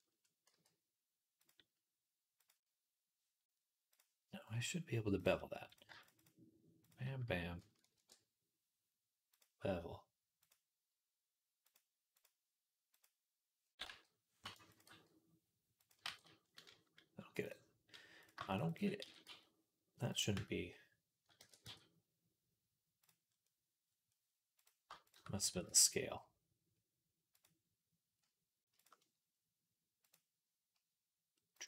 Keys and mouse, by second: 0.4 x, 2.3 middle click, 2.3-10.2 right drag, 3.8-5.6 drag, 3.8-5.6 middle drag, 5.8 alt+shift+click, 5.8 alt+shift+middle click, 6.7 alt+shift+click, 6.7 alt+shift+middle click, 7.8 ctrl+b, 10.2 click, 11.5 click, 12.0 click, 12.7 click, 13.7 g, 14.6 click, 14.7 g, 15.8-21.1 ctrl+right drag, 15.9 ctrl+z, 17.3 click, 17.3 middle click, 18.3 alt+shift+click, 18.3 alt+shift+middle click, 18.5 alt+shift+click, 18.5 alt+shift+middle click, 18.9 s, 20.2 Tab, 21.2 ctrl+a, 24.4 click, 24.4 middle click, 24.4 right click, 25.3 ctrl+a, 28.4-31.6 shift+right drag, 28.6 shift+click, 29.9-31.6 drag.